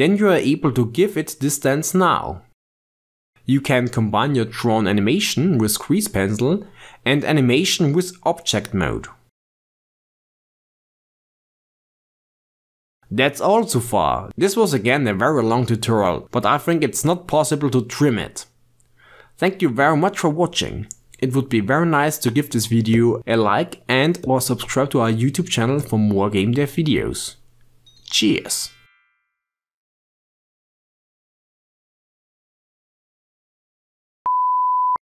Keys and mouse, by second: 0.8-2.8 drag, 3.2 g, 6.0 i, 8.4 click, 9.0 click, 9.5 shift+space, 21.3 n, 23.6-26.6 ctrl+middle drag.